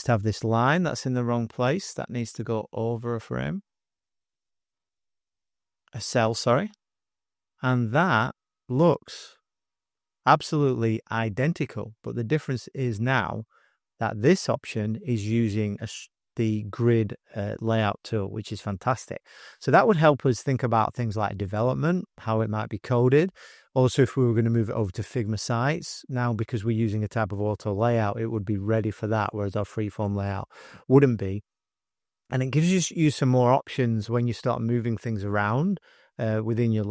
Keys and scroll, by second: 9.4 §, 9.9 space, 10.4 space, 10.5 space, 12.0-14.9 typing, 16.3 super+0.